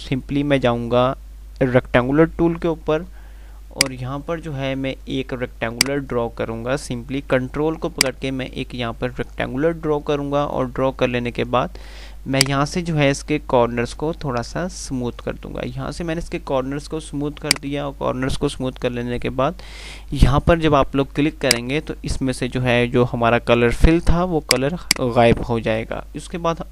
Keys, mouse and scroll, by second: 3.5 F2, 5.7-12.3 drag, 21.6 click, 24.7 click.